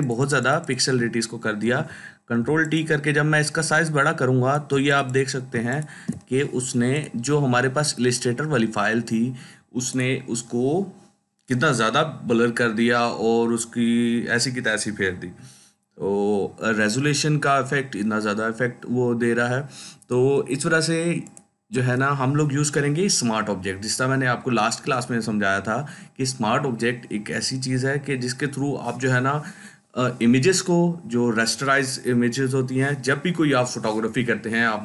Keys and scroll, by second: 1.5 ctrl+t, 5.4 ctrl+space, 21.6 Delete.